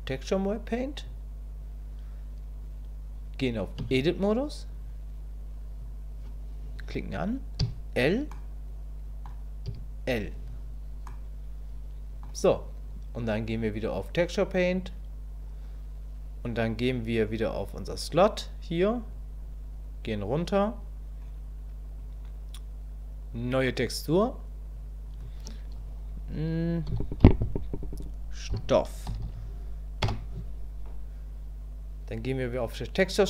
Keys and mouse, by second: 3.8 Tab, 5.8 click, 8.4 click, 9.7 l, 11.2-12.3 drag, 13.4-14.8 drag, 23.8 click, 24.8-31.4 drag.